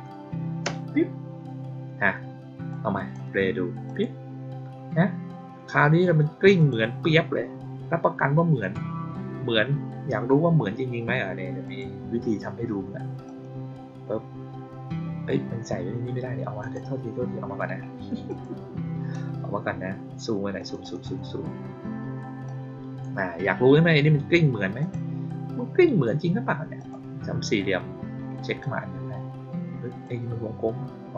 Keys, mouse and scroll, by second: 2.6-3.0 drag, 3.8 click, 6.5 click, 8.5 click, 11.6 click, 13.2 click, 16.5 click, 18.2 click, 20.5 click, 20.7 click, 21.0 click, 22.4-22.9 drag, 24.7 click, 26.7 click, 28.5-30.0 drag.